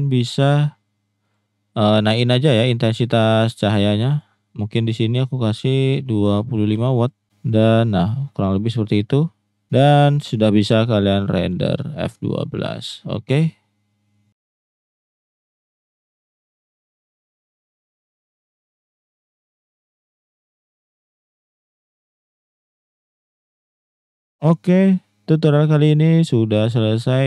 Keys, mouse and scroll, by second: 5.1-7.1 drag, 11.5 F12.